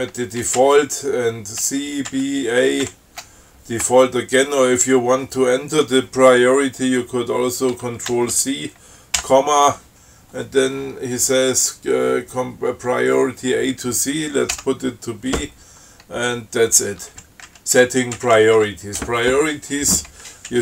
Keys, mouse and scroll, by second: 0.9 shift+Up, 1.9 shift+Up, 3.1 shift+Up, 8.4 ctrl+c, 9.5 ,, 14.8 b, 17.4 shift+Up.